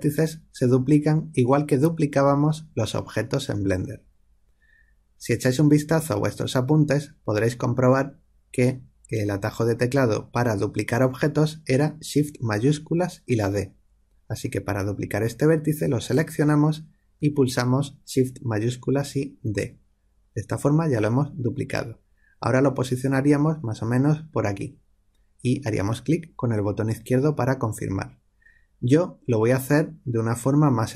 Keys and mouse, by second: 15.9 click, 19.4 shift+d.